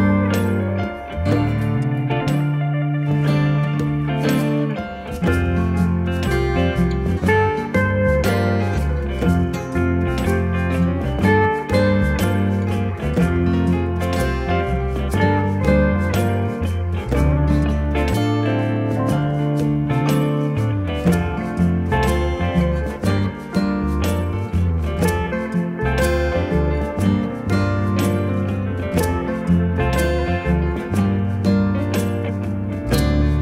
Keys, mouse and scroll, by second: 5.3 click, 11.4 click, 17.1 click, 19.4 click, 25.1 alt+click, 31.1 click.